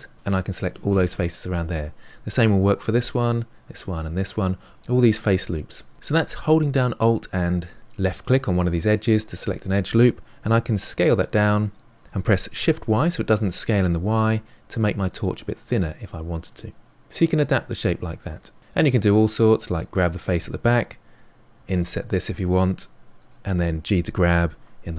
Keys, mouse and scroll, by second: 2.5 alt+click, 3.2 alt+click, 4.0 alt+click, 11.0 s, 15.5-17.2 middle drag, 19.7 click, 21.5 i, 23.6 g.